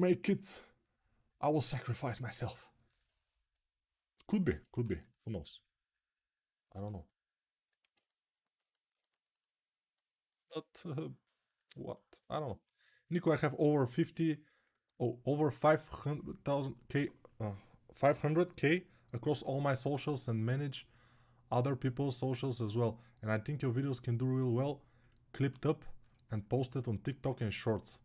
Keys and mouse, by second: 4.5 1, 14.4-27.4 ctrl+alt+drag, 27.4-28.0 alt+right drag.